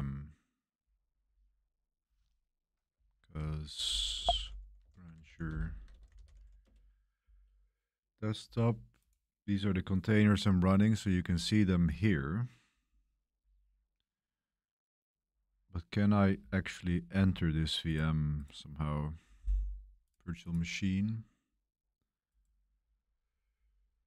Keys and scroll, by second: 3.2 super+5, 4.1 super+space, 4.1 super+m, 4.5-7.1 typing.